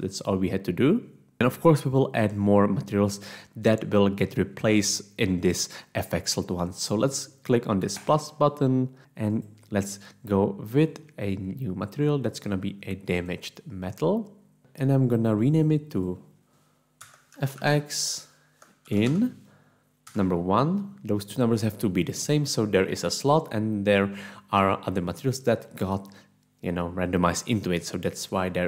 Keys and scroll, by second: 17.3-20.1 typing.